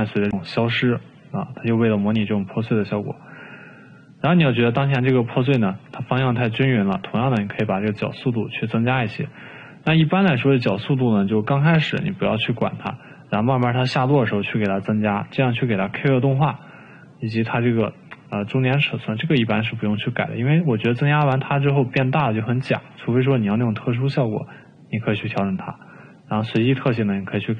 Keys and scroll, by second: 11.6 ctrl+z, 17.4 ctrl+z.